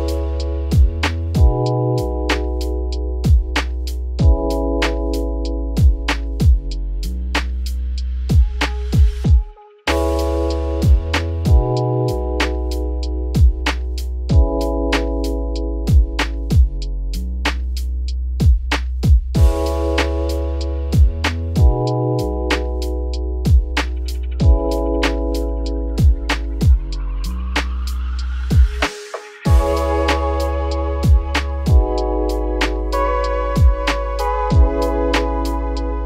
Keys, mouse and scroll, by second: 0.0 Tab, 0.5 `, 0.9 a, 1.1-2.3 scroll down 19, 2.3 middle click, 2.7 f, 3.0 scroll down 2, 3.3 shift+middle click, 3.7 e, 7.1 middle click, 7.6 scroll up 2, 7.8 middle click, 8.2 `, 8.6 z, 8.8-9.3 scroll up 3, 9.3 click, 10.1 shift+click, 10.6 2, 10.9 click, 11.4 shift+click, 11.9 shift+click, 13.0 ctrl+b, 15.5 Tab, 15.8-16.4 scroll down 5, 16.4-16.9 middle drag, 16.9 Tab, 17.2 scroll up 1, 17.4 3, 17.8 z, 18.3 click, 19.0 ctrl+b, 21.2 Tab, 21.4 scroll down 2, 21.5-22.1 middle drag, 22.1 ctrl+s, 22.4 scroll up 2, 22.6-23.3 right drag, 23.3-24.0 middle drag, 24.0 click, 24.2-25.1 middle drag, 25.1-25.8 scroll down 11, 25.8-26.4 scroll up 10, 26.4 click, 27.4 click, 28.3-29.1 drag, 29.5-29.8 middle drag, 29.8-30.6 scroll up 2, 30.8-32.3 drag, 32.3-33.1 scroll down 1, 33.1 click, 34.4 click, 34.8-35.8 middle drag, 35.8-36.0 drag.